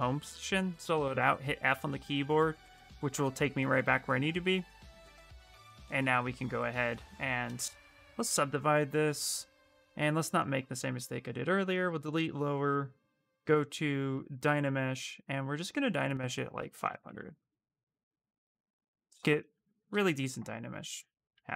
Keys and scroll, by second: 0.9 f, 2.0 f, 2.9 q, 4.7 b, 7.7 ctrl+d, 19.3 shift+f.